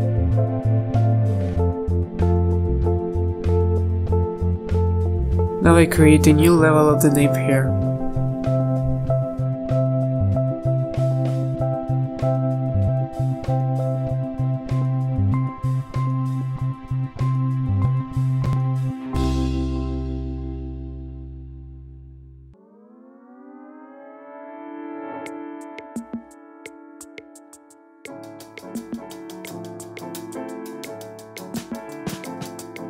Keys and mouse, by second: 3.4 a, 3.7 z, 4.2 h, 4.7 z, 7.1 drag, 7.4 ctrl+z, 8.9-9.2 drag, 9.2 ctrl+z, 9.4 ctrl+z, 11.7 a, 12.3 KP_3, 12.5 z, 14.0 ctrl+s, 14.4 z, 14.6 z, 15.9 z, 16.3 KP_3, 16.5 z, 18.7 click, 22.5 click, 23.9 click, 26.5-28.2 middle drag, 28.2 z, 28.8-30.0 middle drag, 30.0 z, 30.7-32.8 middle drag.